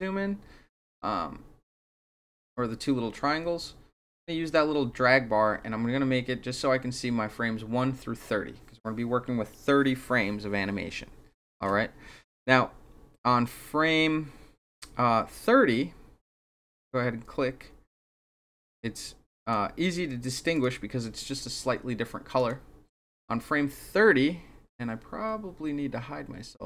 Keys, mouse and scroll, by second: 16.3 click, 19.4 click, 20.5 click, 22.3 click, 26.6 click.